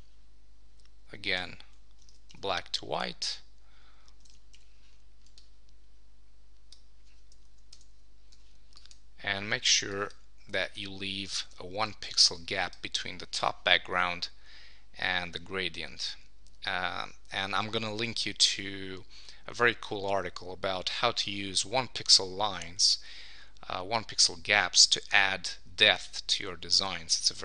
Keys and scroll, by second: 2.1 super+d, 4.2 super+1, 7.7 Down.